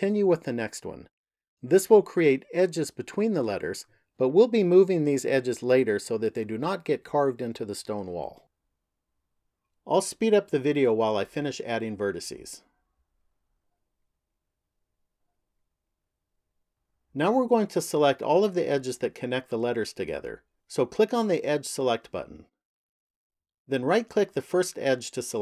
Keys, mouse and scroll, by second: 0.9 ctrl+click, 2.6 ctrl+click, 4.2 ctrl+click, 6.2 ctrl+click, 6.9 ctrl+click, 7.4 ctrl+click, 7.8 ctrl+click, 8.4 ctrl+click, 8.9 ctrl+click, 9.4 ctrl+click, 9.9 ctrl+click, 10.4 ctrl+click, 10.9 ctrl+click, 11.3 ctrl+click, 11.9 ctrl+click, 12.5-13.8 ctrl+click, 12.8 ctrl+click, 14.0-14.8 ctrl+click, 14.1 ctrl+click, 14.9-16.8 ctrl+click, 15.0 ctrl+click, 15.1 ctrl+click, 22.6 click.